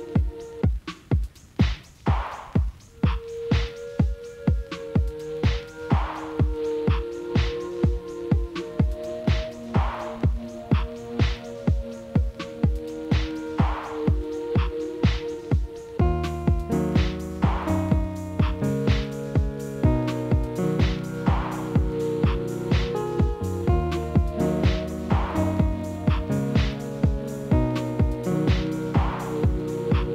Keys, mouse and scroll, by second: 0.5 ctrl+shift+z, 1.0-1.3 scroll down 1, 1.3 scroll up 2, 1.6-2.4 shift+middle drag, 2.4 click, 2.7 shift+drag, 3.1 shift+click, 3.7 shift+click, 5.3 shift+click, 6.0 shift+click, 6.4 shift+click, 6.8 shift+click, 7.2 shift+click, 7.6-8.4 scroll down 4, 8.4-9.2 scroll up 1, 9.2 KP_Divide, 9.7-10.2 scroll up 7, 10.2 shift+middle click, 11.0 shift+click, 11.3 shift+click, 11.9-12.4 scroll up 1, 12.4 KP_Divide, 13.0 KP_Divide, 13.5 middle click, 13.8-14.4 scroll up 2, 14.4 shift+click, 14.7 shift+click, 15.0 shift+click, 15.4 shift+click, 15.7 shift+click, 16.7 shift+click, 17.1-17.5 scroll down 2, 17.5 ctrl+p, 18.5 click, 18.7 click, 19.2 g, 20.5 KP_Divide, 21.1 click, 21.5 click, 22.0 g, 22.7 click, 23.2 g, 26.5-27.6 middle drag, 27.6 shift+z, 27.9-28.3 scroll up 2, 28.3 scroll down 2, 28.5 middle click, 29.2 KP_7, 29.5 scroll up 2, 29.7-30.1 shift+middle drag.